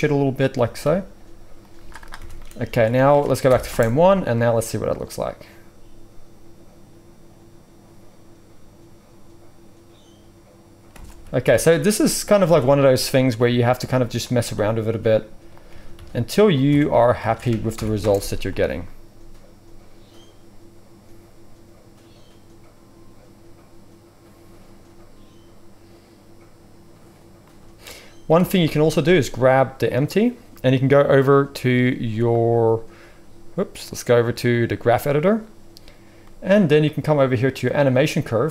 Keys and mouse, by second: 0.5 g, 1.7 z, 2.2-4.8 drag, 2.3 Tab, 2.7 alt+a, 3.4 shift+Left, 3.6 space, 4.8-11.2 right drag, 10.9 space, 11.2 shift+click, 11.4 shift+KP_1, 11.5-12.5 right drag, 12.3 click, 12.3 middle click, 12.5 Tab, 12.9 right click, 13.1 click, 13.4 g, 14.1-17.1 middle drag, 14.3 s, 15.6 g, 16.8 Tab, 17.2 alt+a, 17.7 shift+Left, 18.0 space, 28.3 space, 31.4-31.7 drag, 31.4 space, 32.2 click, 32.3 middle click, 33.0 click, 34.8-38.5 drag.